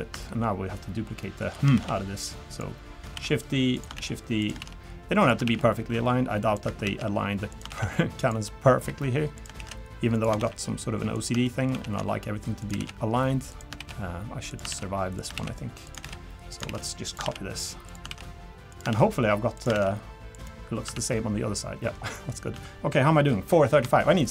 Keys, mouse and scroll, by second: 0.2 shift+middle click, 1.2 shift+middle click, 1.7 shift+d, 3.1 shift+d, 3.9 shift+d, 4.6 shift+d, 5.4 shift+d, 6.8 shift+d, 7.7 shift+d, 8.8 g, 9.6 shift+d, 10.4 shift+d, 11.4 shift+middle click, 11.7 shift+d, 12.8-19.7 typing, 20.6 scroll down 2, 20.9 Tab, 21.0 middle click, 22.1 middle click, 22.5 Tab, 23.5 scroll down 1, 23.8 shift+middle click, 24.2 middle click.